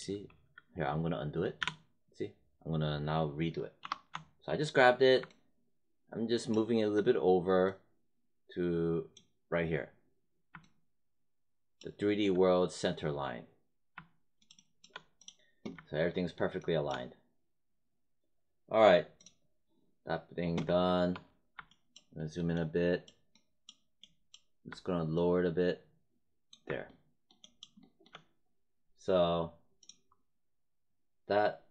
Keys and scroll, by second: 1.5 z, 3.7 ctrl+y.